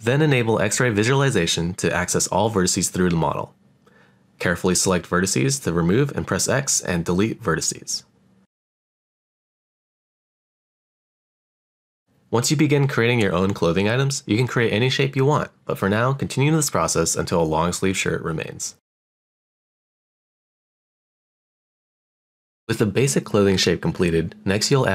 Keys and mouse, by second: 0.2 middle click, 3.7 click, 4.0-5.2 drag, 5.4 shift+middle click, 6.6 shift+click, 7.8 shift+click, 8.0 shift+click, 9.0 shift+click, 9.3 shift+click, 10.3 shift+click, 11.1 x, 12.4 shift+middle click, 12.9 click, 12.9 click, 13.2 x, 13.5 middle click, 14.1 shift+middle click, 14.6 shift+middle click, 14.9 click, 15.4 shift+click, 15.6 x, 16.0 shift+middle click, 16.8 shift+middle click, 17.2 click, 17.5 shift+click, 17.6 x, 18.0 middle click, 18.5 click, 19.1 x, 19.3 shift+middle click, 19.7 middle click, 20.4 click, 21.0 shift+click, 21.1 shift+click, 21.5 x, 21.7 middle click, 22.0 middle click, 22.3 middle click, 23.2 click.